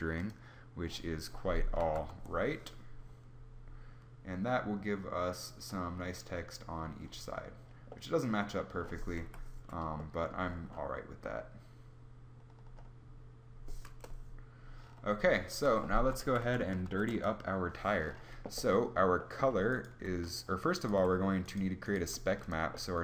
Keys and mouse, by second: 0.0 z, 1.7 shift+z, 9.0 KP_5, 13.8 KP_0, 16.1 KP_0, 16.1 z, 16.3 z, 16.7 ctrl+s, 19.7 g, 20.7 g, 21.9 g.